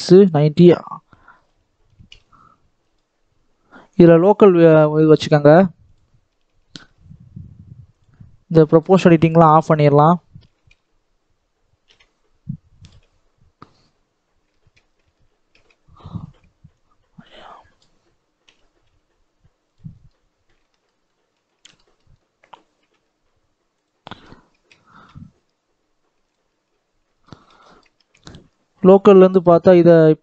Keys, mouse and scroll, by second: 0.5 r, 4.4-6.2 drag, 6.2 Tab, 6.7 s, 8.6 click, 8.9 scroll up 1, 9.1 shift+middle click, 9.5-10.4 scroll up 1, 10.4 r, 14.4 shift+middle click, 14.9 ctrl+z, 15.5 Tab, 16.7 click, 18.7 g, 19.8 scroll down 2, 19.9-22.0 middle drag, 22.0-22.7 scroll up 2, 22.7 g, 23.9 middle click, 24.4 Tab, 24.9 s, 26.5 Tab, 26.9 scroll down 1, 27.1 middle click, 27.9 Tab, 29.7 click, 30.0-30.2 scroll down 1.